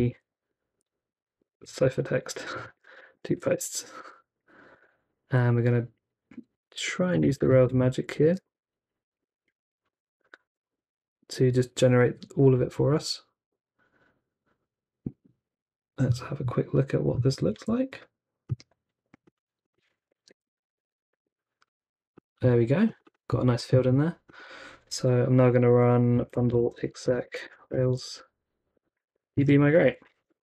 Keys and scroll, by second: 0.1 super+v, 0.3 Left, 0.5 super+v, 0.6 Left, 1.0 super+v, 1.4 BackSpace, 4.7 space, 6.5-10.9 typing, 9.2 super+v, 12.5 Return, 17.3 super+c, 17.5 super+c, 19.9 super+t, 20.1-21.6 typing, 25.9-30.4 typing.